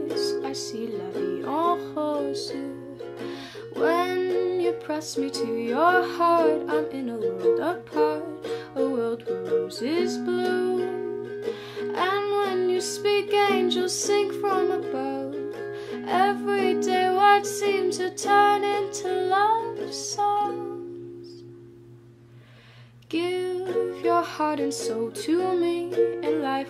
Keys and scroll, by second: 0.0-0.1 typing, 6.7-9.2 typing, 13.9-15.3 typing, 15.4 Return, 19.8-21.9 typing, 24.9 u.